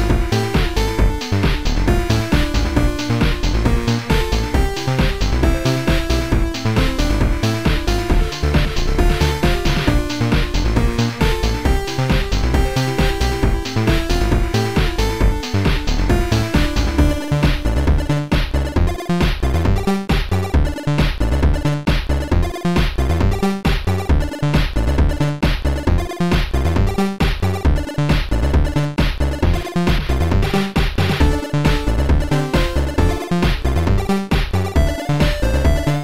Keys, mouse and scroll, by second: 1.1 click, 2.7 click, 4.1 click, 5.1 click, 6.6 click, 8.1 click, 9.2 click, 10.5 click, 11.5 click, 11.6 click, 13.3 click, 17.9 click, 19.1 click, 21.2 right click, 21.9 right click, 23.0 click, 24.4 click, 25.9 click, 25.9 right click, 28.4 click, 31.8 click.